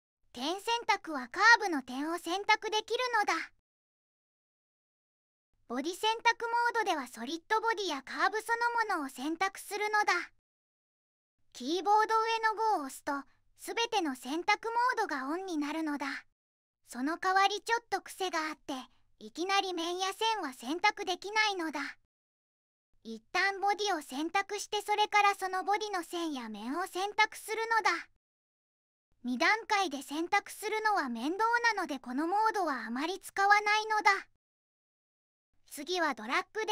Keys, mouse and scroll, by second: 1.2-1.9 drag, 12.1 5.